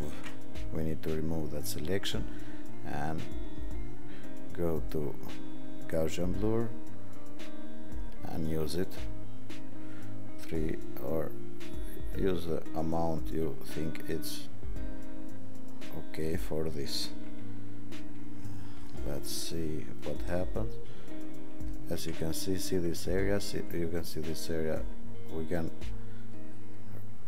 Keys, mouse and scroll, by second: 0.1 ctrl+d, 12.3 click, 14.3 click, 17.2 ctrl+=, 17.8 ctrl+=, 18.1 ctrl+=, 26.4 click.